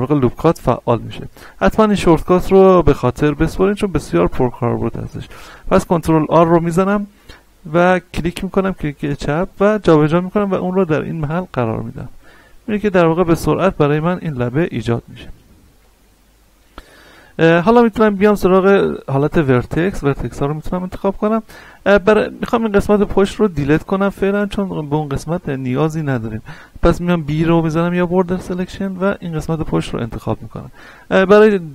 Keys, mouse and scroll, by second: 0.0 ctrl+r, 8.1 click, 12.9 click, 13.3 scroll down 1, 13.8 shift+middle click, 14.0 shift+scroll up 1, 15.5-18.1 shift+middle drag, 18.1 ctrl+Tab, 19.5 click, 20.1-20.6 scroll down 1, 20.6 a, 20.9-22.7 middle drag, 22.7-23.5 scroll up 1, 23.6 shift+middle click, 24.6-25.0 scroll down 2, 25.0-26.8 shift+middle drag, 26.8 b, 27.8-30.0 drag, 30.0-31.7 middle drag.